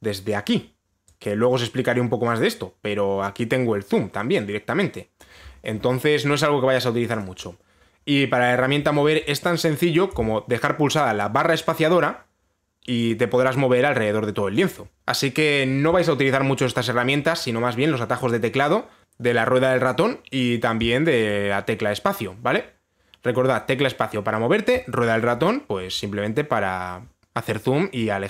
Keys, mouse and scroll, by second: 0.4 right click, 5.8 click, 7.8 click, 15.2-16.6 click, 25.3 click, 25.4 click.